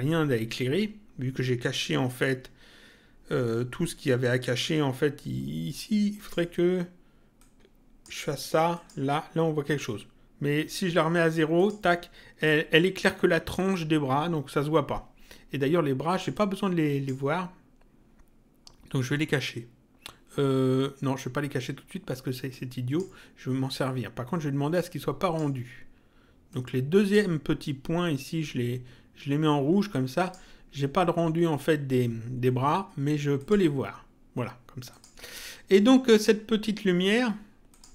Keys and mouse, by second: 6.1 click, 7.3 click, 8.7 click, 11.5 click, 16.0 click, 22.4 click, 24.7 click, 26.4 click, 30.1 click, 33.3 click, 34.8 click, 37.6 click.